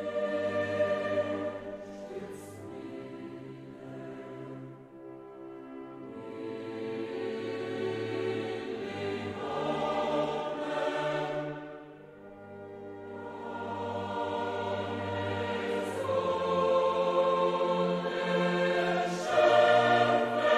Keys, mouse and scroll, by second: 0.9-2.2 scroll down 7, 2.8 click, 4.0 click, 6.3 click, 7.7 click, 10.0 click, 11.0 click, 12.2-12.9 scroll down 2, 14.9 click, 15.6 click, 16.9 click, 19.2 click.